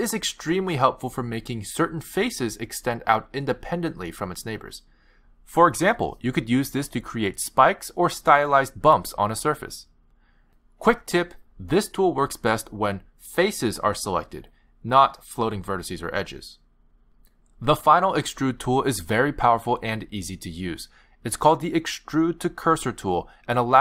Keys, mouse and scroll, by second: 2.0 right click, 3.9 click, 6.5 click, 8.7 s, 10.6 middle click, 16.1 ctrl+z, 16.1 click, 19.8 ctrl+z, 21.5 shift+click, 22.2 click.